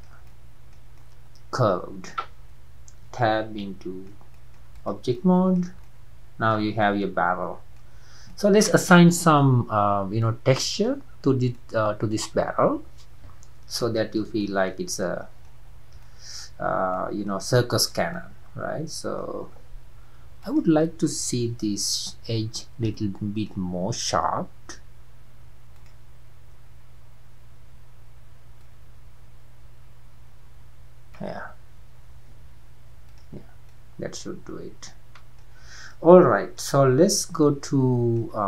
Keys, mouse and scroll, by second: 2.4-3.0 scroll down 2, 3.0 Tab, 3.3-3.7 scroll down 1, 3.7-4.8 middle drag, 4.8 click, 5.2-8.0 middle drag, 8.0 scroll down 1, 8.3-9.7 middle drag, 9.7-10.2 scroll up 2, 10.2-11.1 middle drag, 11.1-11.6 scroll down 2, 11.6-12.3 middle drag, 12.3-13.1 scroll up 5, 13.9-15.6 shift+middle drag, 15.6 scroll down 3, 16.1-16.6 shift+middle drag, 16.6-17.0 scroll down 3, 17.0-20.4 middle drag, 20.4 click, 21.7 Tab, 22.4-23.0 scroll up 2, 23.0-23.7 shift+middle drag, 23.7 scroll up 2, 25.8-31.7 drag, 32.5 Tab, 33.1 drag, 33.4 scroll down 2, 33.7-35.5 middle drag, 35.5-35.9 scroll down 4, 35.9-37.1 middle drag, 37.1 scroll down 2, 37.4-38.2 middle drag, 38.2 scroll up 1, 38.3 scroll down 3.